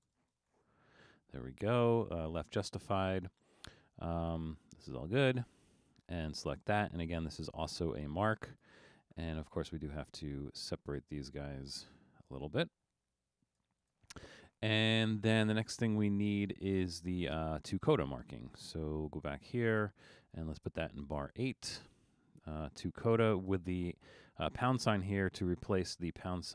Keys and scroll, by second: 0.0-1.2 typing, 10.0 Escape, 21.2 Return.